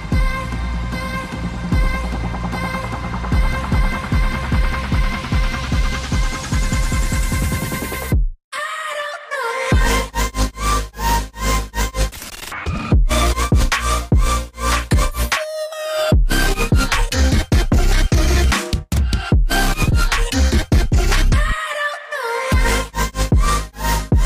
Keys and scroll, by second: 18.0 c, 20.4 v, 22.4 ctrl+j, 22.5 ctrl+j, 22.6 ctrl+j, 22.7 Return, 23.6 ctrl+j, 23.9 ctrl+j, 23.9 Return.